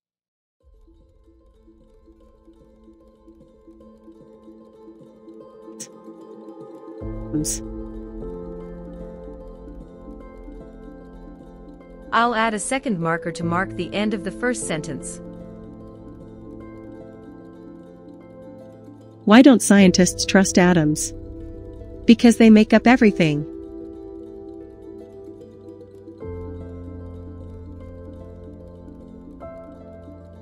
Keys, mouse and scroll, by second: 1.8-3.0 drag, 1.8 space, 5.0 click, 6.2 space, 6.8 click, 7.8 space, 8.1 space, 8.6 click, 10.3-13.8 drag, 15.0 click, 15.3 click, 18.5 click, 20.6 space, 23.5 space, 24.3 click, 25.0 click, 25.4 click, 28.2 click, 29.0 click, 29.2 click.